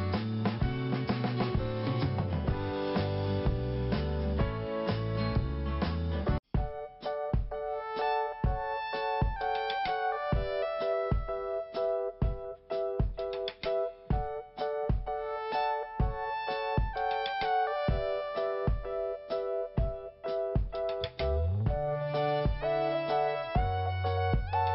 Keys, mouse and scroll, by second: 2.0 click, 5.7 click, 10.8 scroll down 1, 11.9 click, 15.3 scroll up 1, 16.2 click, 20.0 click, 24.5 click.